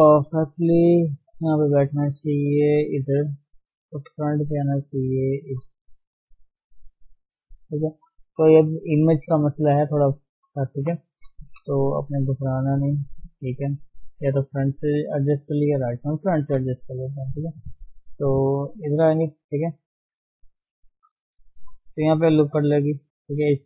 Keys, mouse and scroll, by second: 0.5 shift+z, 1.1-2.3 middle drag, 2.3 g, 3.3 shift+z, 4.1 KP_1, 5.5 g, 7.0 shift+z, 7.4 scroll up 1, 8.1-8.9 scroll down 4, 10.7 KP_3, 11.0-11.8 scroll up 4, 11.8 shift+z, 12.5 shift+z, 13.7 scroll down 2, 14.2 KP_1, 14.8 scroll up 1, 15.5-15.9 scroll down 4, 15.9 shift+middle click, 16.1 scroll up 1, 17.3 g, 21.2 shift+middle click, 21.5 scroll up 1, 22.6 ctrl+r, 23.4 scroll up 1.